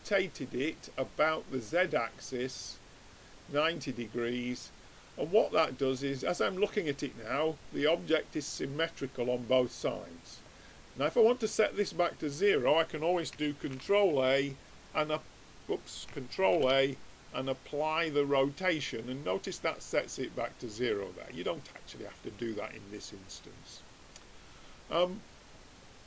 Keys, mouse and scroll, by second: 3.5-5.5 drag, 6.0 middle click, 13.7 ctrl+a, 16.6 ctrl+a, 21.0-26.0 middle drag.